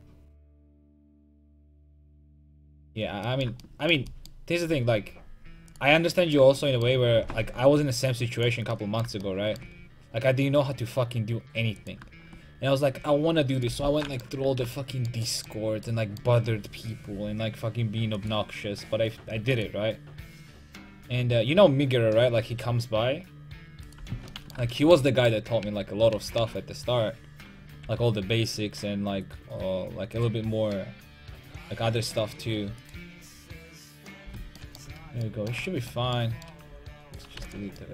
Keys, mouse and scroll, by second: 14.4 a, 17.1 k, 24.3 click, 25.6 a, 26.1 a, 26.4 a, 27.6 k, 34.6 middle click, 34.9 a, 36.4-37.9 drag, 37.4 x.